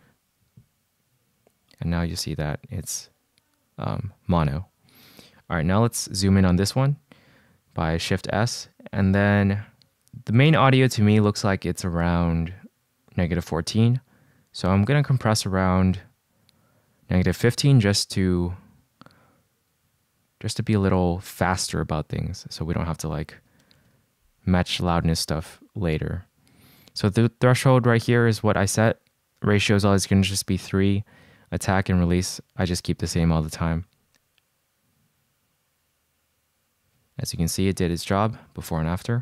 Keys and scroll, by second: 6.0 shift+s, 21.7 d, 23.3-24.5 typing, 37.4 super+z, 38.0 shift+super+z, 38.5 super+z, 39.0 shift+super+z.